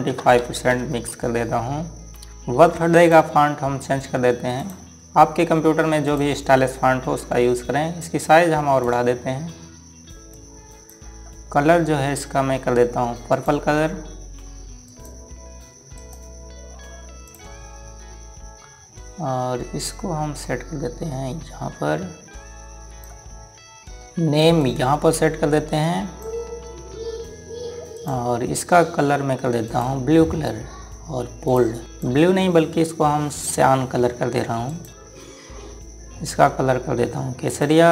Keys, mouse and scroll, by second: 0.9 KP_2, 1.1 KP_5, 1.5 KP_Enter, 2.3 click, 14.1 click, 16.8 right click, 18.0 click, 20.7 click, 24.0 typing, 24.2 click, 35.0 click.